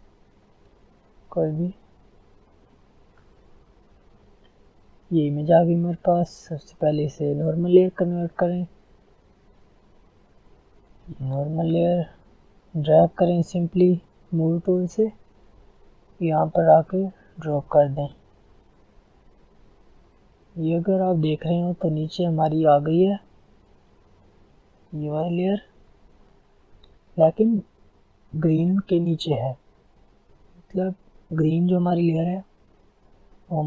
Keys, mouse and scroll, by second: 2.0 click, 4.1 F10, 8.5-20.0 drag, 20.5 click, 23.3-24.7 scroll down 1, 24.8 click, 29.9 click, 30.3 click.